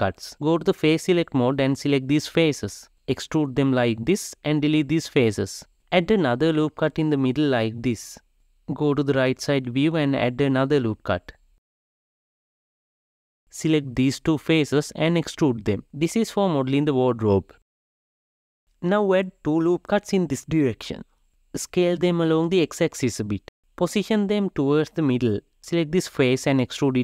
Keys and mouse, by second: 0.7 ctrl+r, 2.4 KP_0, 2.4 e, 4.3 x, 5.7 n, 5.9 ctrl+r, 8.2 3, 8.6 click, 9.7 shift+click, 10.3 KP_3, 10.9 alt+z, 12.0 ctrl+r, 13.3 click, 14.4 shift+click, 16.2 e, 18.7 Tab, 19.5 ctrl+r, 22.9 g, 25.0 3, 26.7 click.